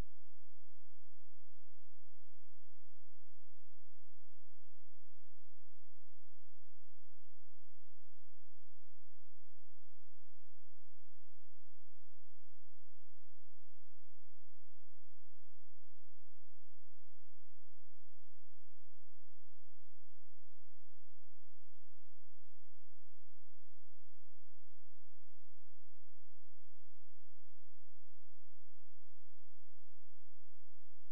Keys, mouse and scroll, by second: 12.0 click, 17.1 Tab, 19.8 click, 27.0 click.